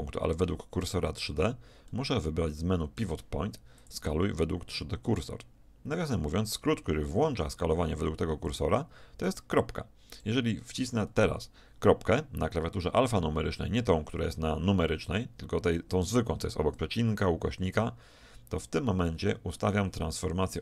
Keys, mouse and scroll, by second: 1.9-3.4 middle drag, 3.8-6.9 drag, 9.3-11.3 drag, 19.1 ..